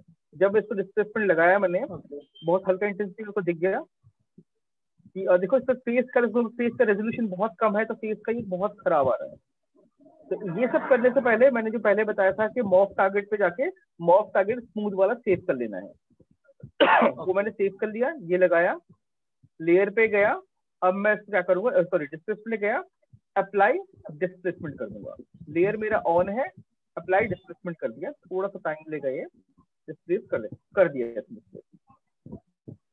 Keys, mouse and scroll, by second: 1.9 right click, 2.8 right click, 4.2 alt+click, 5.0 right click, 5.8 alt+click, 7.6 click, 18.7 click, 21.5 click, 23.7 click, 31.3 click, 31.6 shift+click.